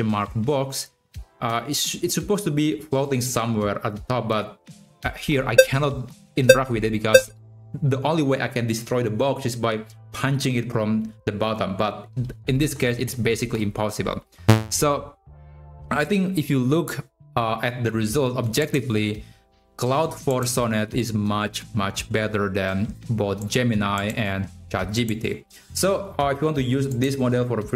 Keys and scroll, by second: 4.8 Left, 5.2 Up, 5.7 Right, 6.1 Up, 6.2 Right, 6.8 Up, 7.0 Right, 14.3 Left.